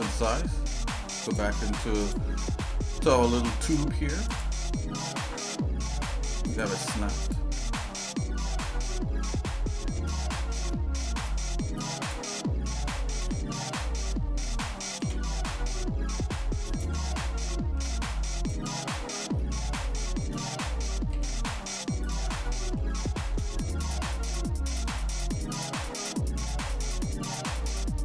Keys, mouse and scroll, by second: 0.2 shift+middle click, 1.3 click, 2.6 Tab, 3.6 click, 4.3 click, 5.0 g, 7.2 click, 7.9-10.1 shift+middle drag, 10.2 middle click, 10.7 shift+middle click, 11.8 click, 13.2 f, 15.0 g, 17.1 shift+middle click, 18.5 ctrl+right click, 19.4 middle click, 19.9 shift+middle click, 21.1 g, 22.5 middle click, 23.1 shift+middle click, 23.5 middle click, 24.3 middle click, 25.2 middle click, 25.9 shift+middle click, 27.0 middle click.